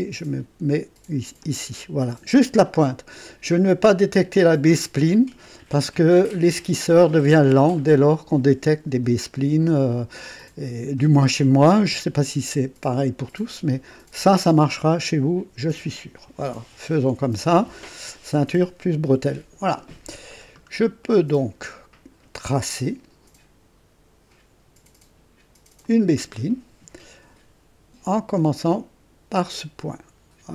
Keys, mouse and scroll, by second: 1.4 click, 5.4 right click, 20.3-20.7 scroll down 1, 21.0-22.3 right drag, 25.8 click, 29.3 click, 30.3-30.5 scroll down 2.